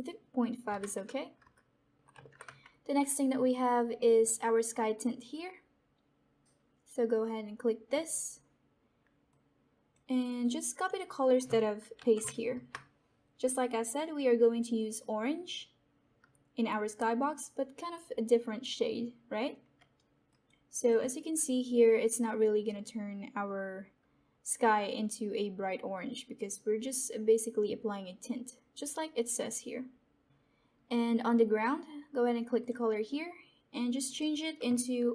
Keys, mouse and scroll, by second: 2.1 ctrl+c, 4.1 click, 7.8-10.8 drag, 11.9 ctrl+v, 14.1-17.0 drag, 20.2 click, 30.2 ctrl+c, 31.5 click.